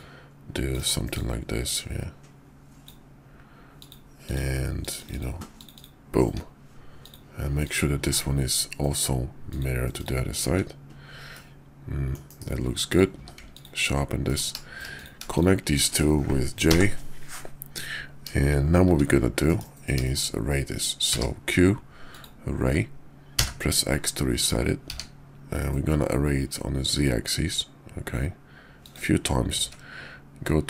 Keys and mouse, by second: 1.2-2.9 drag, 5.7 click, 5.7 typing, 7.0 click, 7.5 click, 8.0 alt+x, 9.5 click, 10.0 click, 10.4 `, 11.3-12.1 middle drag, 12.3 KP_5, 13.1 q, 14.2 click, 16.7 ctrl+j, 18.8 `, 19.4 KP_5, 20.0 shift+click, 20.9 q, 29.5 ctrl+`.